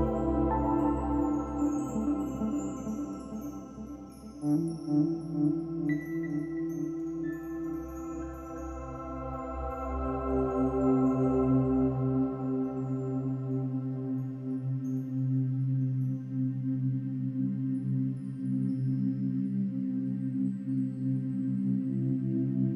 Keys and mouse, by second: 0.4 click, 0.6-1.1 alt+drag, 1.7 ctrl+alt+click, 2.6 ctrl+alt+click, 3.0 ctrl+alt+shift+click, 4.0-4.7 drag, 5.4-6.2 drag, 6.6-7.4 drag, 9.3-10.2 drag, 11.6-14.5 drag, 15.2 g, 17.3-20.8 drag.